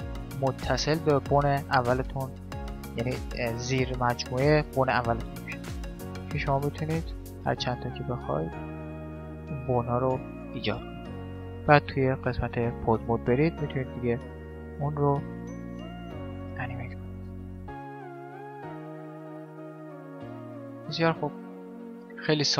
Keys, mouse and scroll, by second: 6.3 e, 7.9 e, 10.2-12.1 middle drag, 11.6 Tab, 13.0-14.5 middle drag, 13.8-16.6 right drag, 15.8 r, 17.4-20.7 right drag, 17.6 r, 20.7-22.5 middle drag, 21.3 Tab.